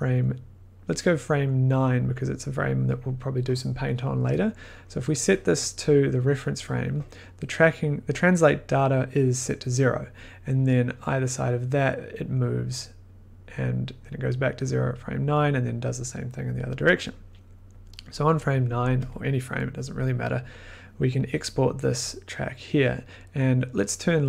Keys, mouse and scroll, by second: 0.0 click, 2.0 click, 5.6 click, 8.7-10.7 drag, 17.7 drag, 19.0 click, 24.1 click.